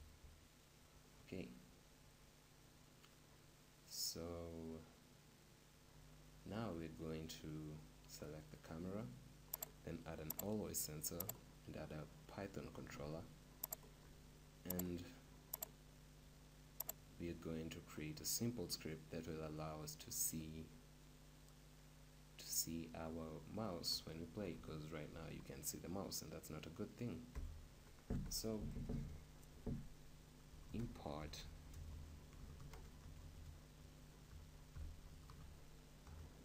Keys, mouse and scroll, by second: 8.3-19.0 right drag, 24.5 p, 27.3 p.